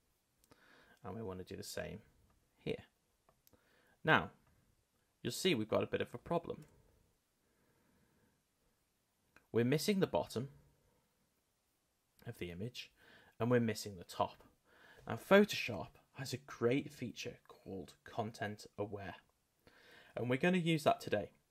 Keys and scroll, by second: 6.6 Return.